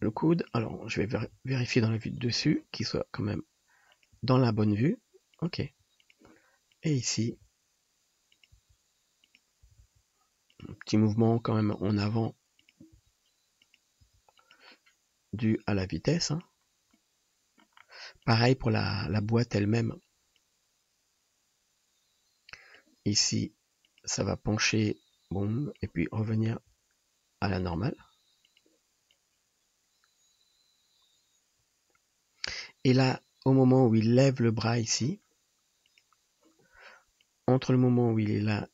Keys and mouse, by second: 0.0 g, 1.2 KP_7, 3.4 r, 4.2 g, 5.7 r, 6.7 middle click, 6.7 right click, 7.3 g, 8.7 r, 9.8 r, 11.1 g, 11.9 r, 13.0 r, 14.2 g, 15.8 r, 18.4 click, 19.1 KP_3, 23.2 r, 26.7 r, 27.9-29.2 drag, 27.9 g, 36.1-37.3 drag.